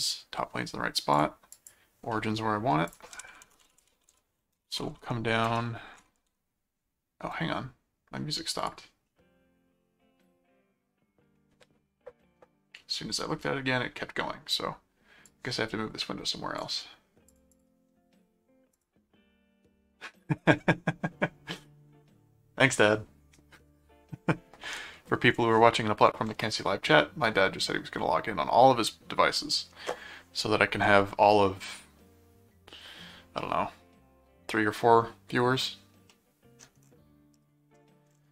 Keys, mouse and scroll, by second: 1.1 click, 2.1 middle click, 2.9-4.8 typing, 2.9 click, 5.5 Return, 5.9 ctrl+5, 8.6 click, 15.3 click, 17.3 click, 18.7 click, 36.1 middle click, 37.3 middle click.